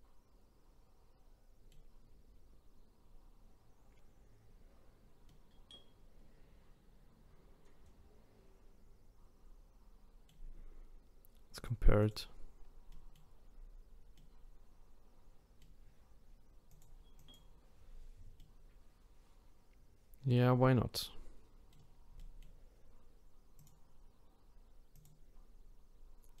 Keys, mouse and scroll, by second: 2.1 scroll up 2, 3.8 scroll down 1, 5.3-8.3 middle drag, 11.5 click, 12.0 click, 12.5-12.9 scroll down 4, 12.9 middle click, 13.4-14.1 scroll up 3, 14.1-16.7 middle drag, 16.7 click, 17.2 click, 18.4-23.6 middle drag, 23.6-26.4 drag.